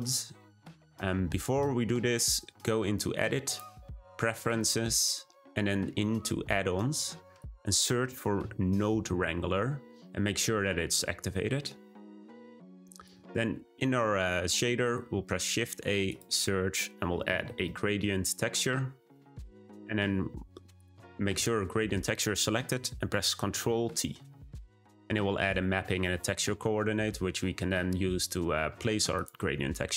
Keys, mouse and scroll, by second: 0.8-2.6 drag, 4.5-8.6 drag, 12.9-17.9 drag, 17.9 shift+a, 20.7-24.1 drag, 24.1 ctrl+t, 29.1-29.9 drag.